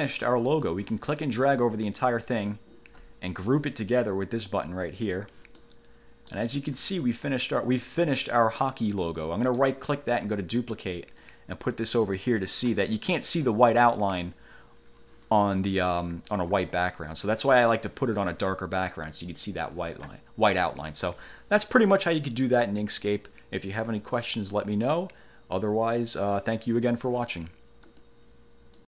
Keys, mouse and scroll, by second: 0.8-2.9 drag, 4.8 click, 5.8-6.7 middle drag, 9.6 right click, 10.4 click, 11.4-13.0 drag, 13.2 middle click, 16.4 click, 17.6 middle click, 19.1 click, 20.1 click, 28.0 click, 28.9 click.